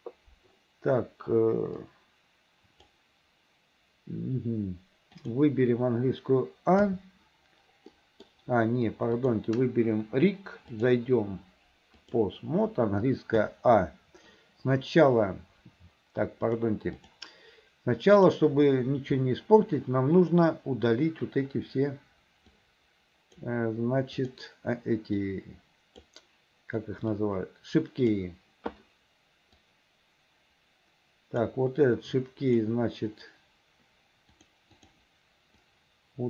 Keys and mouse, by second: 1.9-3.0 drag, 5.3 click, 6.9 a, 8.1 middle click, 9.2 click, 10.9-12.3 drag, 13.5 a, 13.8 a, 16.6 click, 18.2 click, 22.7 click, 24.3-26.1 drag, 27.2-28.3 drag, 29.7-31.6 drag, 32.7-34.5 drag, 35.8-36.2 drag.